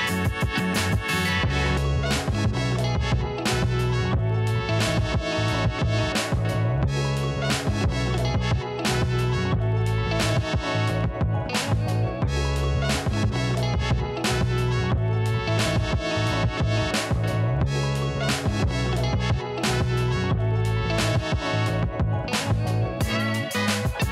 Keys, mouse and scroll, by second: 1.4 click, 1.7 alt+scroll up 1, 2.4 scroll down 1, 3.1 alt+scroll up 1, 4.3-4.6 alt+scroll down 1, 5.0-5.5 alt+scroll up 2, 5.5-6.0 alt+scroll down 1, 6.4 alt+scroll up 1, 6.8 ctrl+s, 8.6 right click, 8.9 click, 14.7 ctrl+z, 15.8 ctrl+z, 17.2 click, 17.5 scroll up 1, 18.0-18.3 scroll down 2, 18.3 Delete.